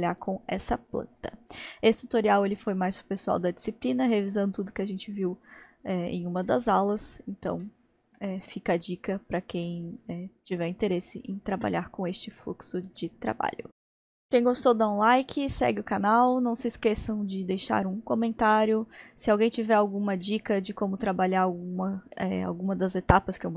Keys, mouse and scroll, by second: 7.6-13.3 shift+middle drag, 13.9-16.9 middle drag, 20.2-21.8 middle drag, 21.8-22.4 scroll down 1, 22.4-23.5 middle drag.